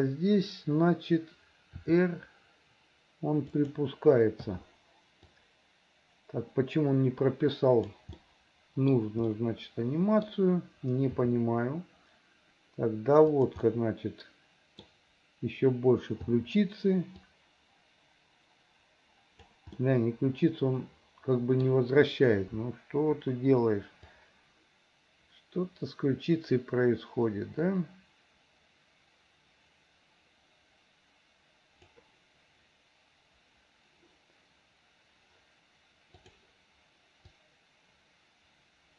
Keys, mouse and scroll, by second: 1.8 r, 4.5 i, 5.4-8.0 drag, 8.2 middle click, 9.4 middle click, 11.2 r, 13.6-14.9 middle drag, 16.4 i, 17.3-19.6 drag, 19.8-21.6 middle drag, 24.2-32.0 drag, 37.4-38.9 drag.